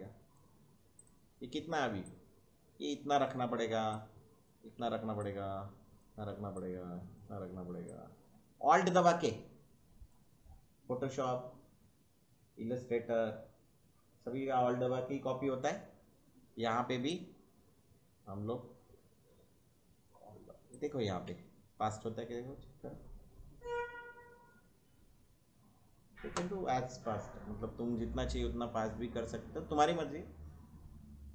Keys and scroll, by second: 21.3 space, 26.2 space, 28.8 space.